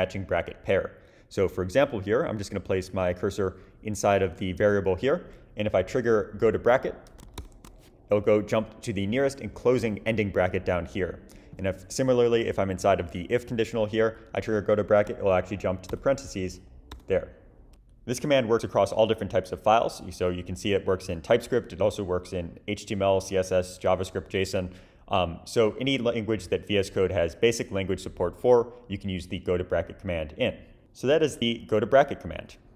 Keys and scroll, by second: 7.4 shift+super+\, 15.9 shift+super+\, 16.9 shift+super+\.